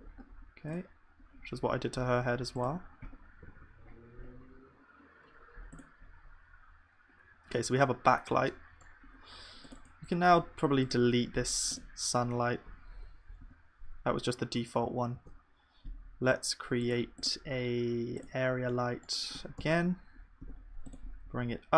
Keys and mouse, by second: 1.4-3.5 right drag, 3.5 ctrl+s, 13.5 KP_0, 15.1 shift+a.